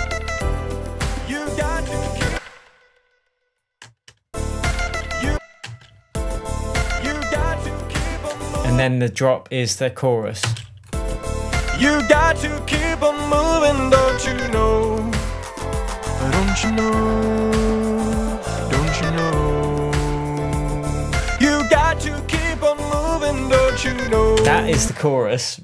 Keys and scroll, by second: 2.3 space, 4.2 space, 5.5 space, 8.7 space, 10.8 space, 24.8 space.